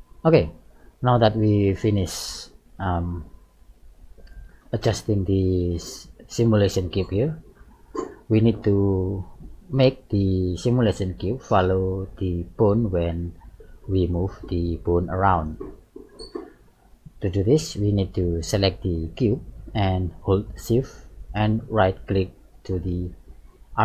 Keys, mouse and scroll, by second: 0.3 middle click, 1.0-1.5 scroll down 3, 1.5 middle click, 2.4-2.8 scroll up 3, 2.8-3.4 scroll down 2, 3.4 middle click, 4.4-4.7 scroll up 2, 4.9 scroll down 2, 6.0-6.4 scroll up 4, 6.4-7.1 scroll down 3, 7.1 middle click, 10.5 middle click, 13.1 right click, 14.0 g, 16.8-17.2 scroll up 2, 17.5 middle click, 18.5 right click, 18.9 middle click, 22.8 shift+right click.